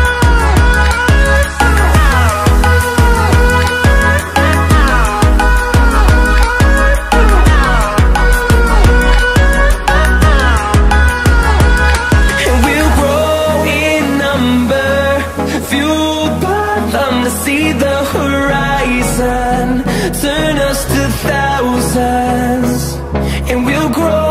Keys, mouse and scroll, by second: 4.8 click, 9.1 click, 10.6-11.0 drag, 11.1 click, 12.5 s, 15.9 s, 20.0 click, 21.6 KP_1, 22.5-24.3 scroll down 6.